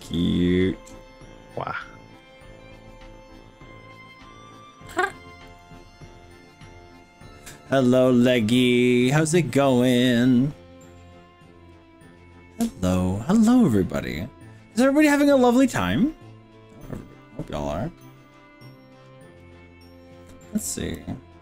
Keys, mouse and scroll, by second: 4.9 click, 5.5 click, 6.6-10.0 middle drag, 10.0 click, 14.0-18.3 middle drag, 18.7 middle click, 19.4 middle click, 20.6 click, 21.0-21.4 drag.